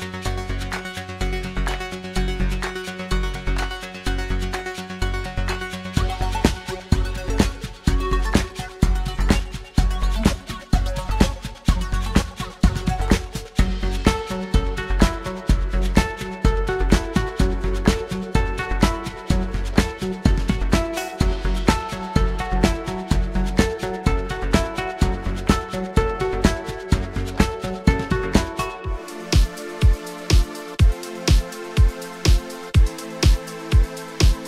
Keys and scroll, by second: 0.7 F9, 7.0 F9, 13.1 s, 20.6 F9, 24.1 v, 26.4 f, 31.6 f.